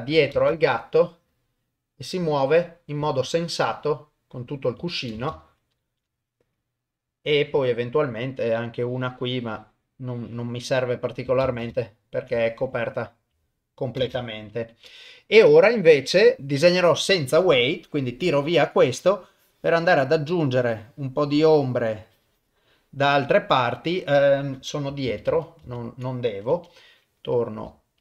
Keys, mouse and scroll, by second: 0.3 shift+space, 5.2 shift+space, 5.9 shift+Left, 7.6 click, 8.8-11.0 drag, 11.4 shift+space, 11.8 ctrl+middle click, 12.4 shift+middle click, 14.0 shift+space, 14.7 shift+Left, 16.4 click, 19.3 click, 20.6-21.6 drag, 22.0 click, 25.1 ctrl+z, 25.3 ctrl+z, 26.5 KP_7.